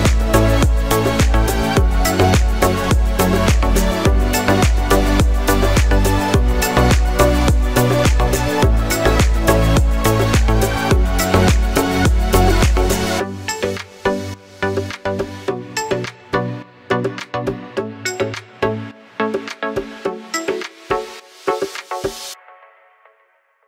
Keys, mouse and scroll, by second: 6.6 alt+right click, 7.5-8.0 alt+scroll up 2, 8.4-8.9 alt+scroll up 2, 8.9 scroll down 1, 10.0 click, 10.3 alt+scroll up 2, 10.5 alt+right click, 11.1 click, 12.2 right click, 12.3 click, 14.2 alt+right click, 14.6 click.